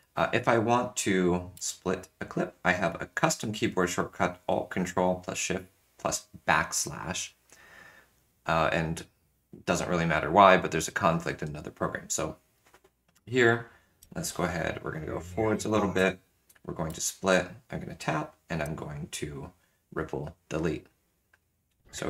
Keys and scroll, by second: 1.5 ctrl+alt+shift+\, 13.9 space, 16.0 space.